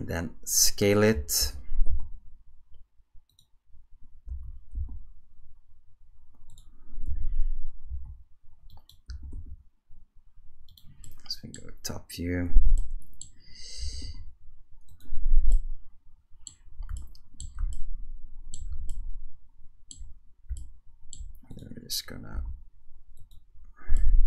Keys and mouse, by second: 1.4 g, 4.3 s, 7.1 g, 9.1 g, 11.0-11.6 drag, 12.8-13.2 middle drag, 13.8 g, 15.5-16.5 middle drag, 17.0-17.6 shift+middle drag, 17.7-18.6 ctrl+middle drag, 18.9-19.9 shift+middle drag, 20.6-21.2 shift+middle drag, 21.5 click, 22.3 s, 24.0 shift+middle drag.